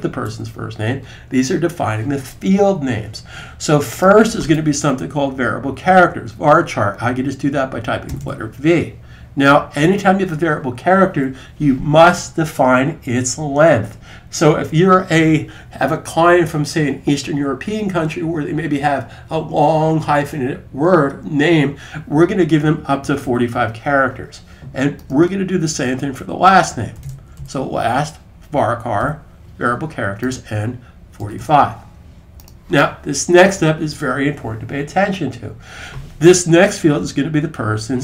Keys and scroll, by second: 7.8 typing, 22.7-23.5 typing, 26.5-27.6 typing, 28.8 typing, 30.8-31.5 typing, 36.9 typing.